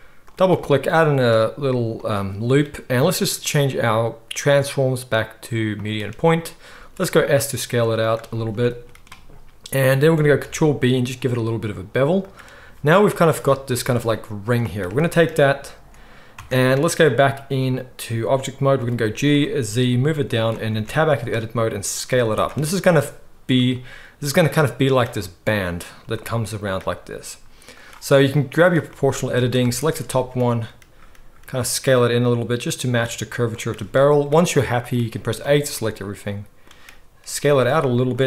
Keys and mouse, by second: 1.1 s, 2.1-3.2 middle drag, 3.2-8.1 drag, 6.7 s, 8.1-14.1 middle drag, 10.4 ctrl+b, 13.4 z, 14.1-20.4 drag, 16.4 Tab, 18.8 g, 20.4-28.6 middle drag, 20.7 Tab, 21.2 s, 22.1 z, 26.9 s, 28.6 click, 28.7 middle click, 29.3 alt+a, 29.8 alt+shift+click, 30.1 s, 34.8 click, 35.4-38.2 middle drag, 35.4 a, 37.5 s.